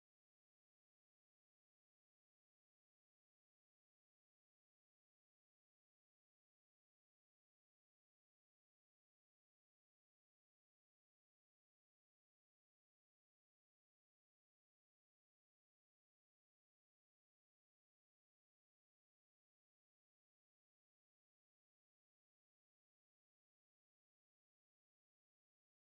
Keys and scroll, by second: 0.8 w, 1.8 space, 2.2 space, 3.5 space, 4.0 space, 6.2 ctrl+s, 14.2 ctrl+alt+r, 16.2 f, 19.8 q, 21.7 r.